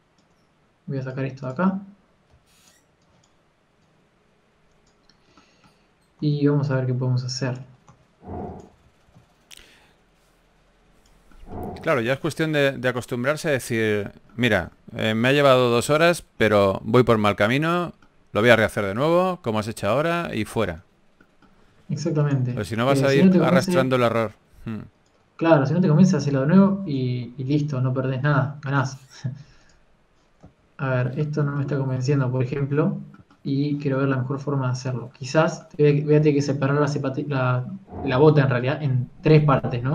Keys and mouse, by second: 2.0 click, 3.2 z, 3.8 b, 5.6 click, 7.1 Tab, 7.5-8.7 drag, 8.7 Tab, 9.1 s, 9.5 a, 9.7 a, 9.9 s, 12.8 s, 14.2-16.0 drag, 16.0 Tab, 16.0 z, 16.6 KP_3, 19.4-21.4 drag, 21.8 Tab, 22.7 ctrl+r, 24.5 s, 27.2 ctrl+z, 27.4 ctrl+z, 32.3 Tab, 32.3 z, 36.4 Tab.